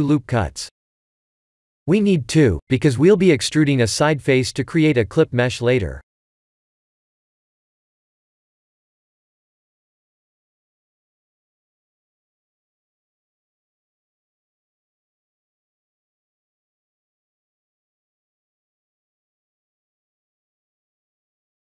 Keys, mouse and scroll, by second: 5.7 Tab, 7.5 click, 8.1 Tab, 8.5 3, 8.6 click, 9.5 click, 10.4 click, 11.8-12.4 scroll down 4, 12.4 e, 14.7 shift+middle click, 15.2 shift+middle click, 15.5-18.0 scroll up 3, 20.1-21.2 scroll down 4, 21.2-21.8 scroll up 2.